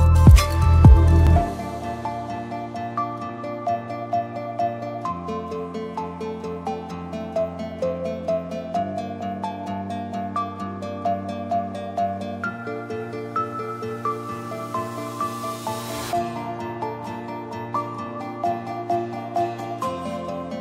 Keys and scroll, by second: 17.4 a.